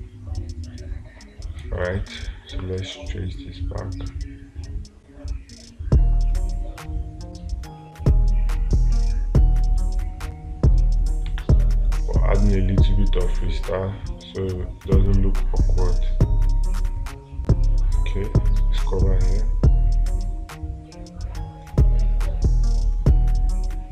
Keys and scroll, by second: 0.2 space, 11.7 space.